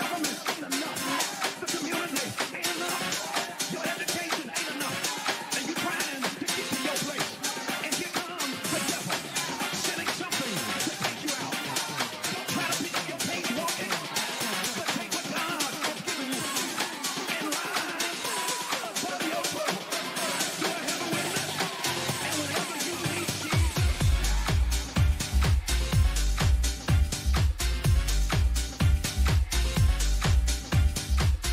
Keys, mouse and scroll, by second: 3.2 double click, 5.9 click, 8.7 click, 9.9 click, 21.9 click, 29.8 click.